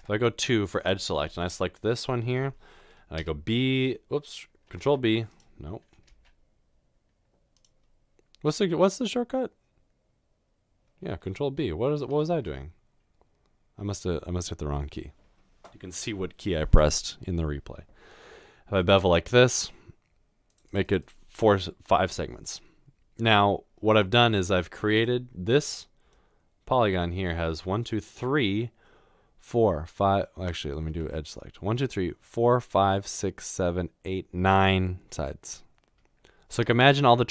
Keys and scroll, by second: 0.0 typing, 3.2 typing, 4.8 ctrl+b, 6.1 ctrl+b, 12.3 ctrl+b, 30.9 1.